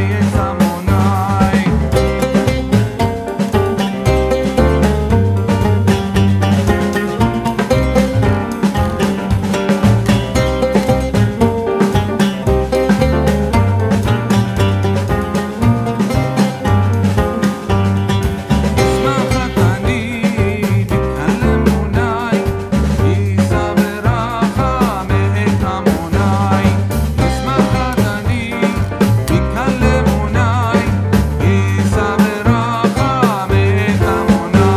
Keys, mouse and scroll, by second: 2.5 click, 4.4 ctrl+c, 4.7 ctrl+f, 6.7-11.3 drag, 15.3 space, 15.4 click, 15.6 space, 16.6-18.0 drag, 19.6 click, 21.2 ctrl+r, 21.9-31.4 drag, 33.5-34.7 drag.